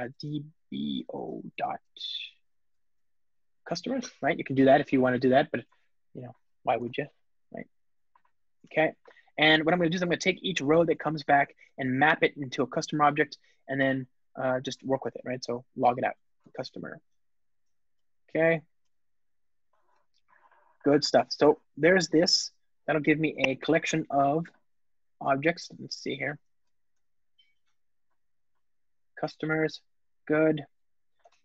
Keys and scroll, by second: 7.9 alt+shift+Left, 10.3 super+p, 17.8 Return, 23.6 alt+super+v, 29.5 Return, 30.9 alt+shift+Left.